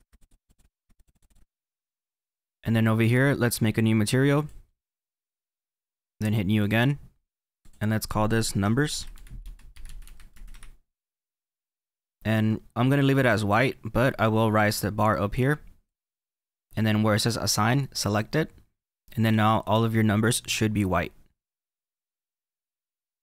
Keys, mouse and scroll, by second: 0.0 middle click, 0.6 middle click, 1.4-3.2 middle drag, 4.2-10.5 drag, 13.4-16.4 drag, 17.9-20.4 drag, 20.4-23.2 middle drag.